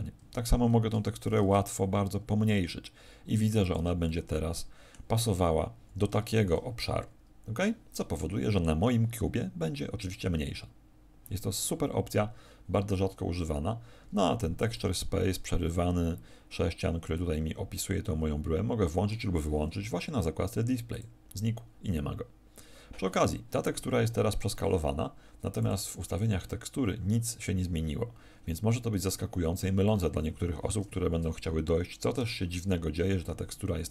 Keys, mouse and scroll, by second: 0.2 Escape, 1.2 alt+shift+t, 3.6 ctrl+click, 4.0 middle click, 12.8 Escape, 14.7 middle click, 17.1 middle click, 20.8 click, 25.6 click.